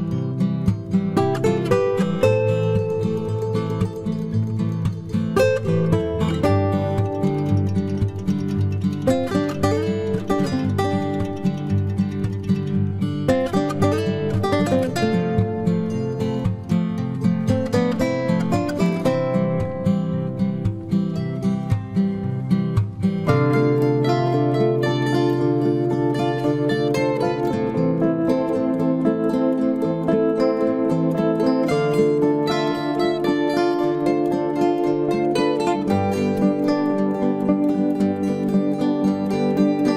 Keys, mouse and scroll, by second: 11.2 v, 12.7 c, 14.0-15.9 right drag, 15.3 h, 16.4 z, 17.0 z, 18.6 x, 21.7 z, 22.6 z, 24.8-26.8 right drag, 26.1 g, 27.7-30.9 right drag, 27.8 g, 29.2 g, 31.2 ctrl+z, 31.4 ctrl+z, 31.6 ctrl+z, 31.9 ctrl+z, 32.0 ctrl+z, 34.0 c, 39.8 x.